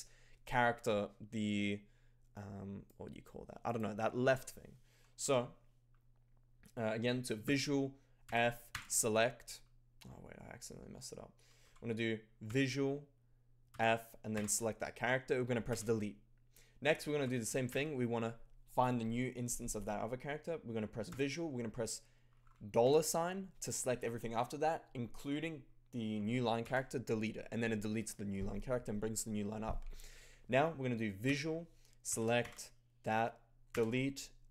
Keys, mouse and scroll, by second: 2.8 click, 3.6 click, 5.2 0, 7.4 v, 8.2 f, 8.6 shift+>, 11.6 0, 12.4 v, 13.7 f, 14.3 shift+>, 15.6 d, 17.2 f, 17.6 shift+<, 21.1 v, 22.8 shift+$, 26.6 d, 31.3 v, 32.0 f, 32.3 shift+>, 33.6 d.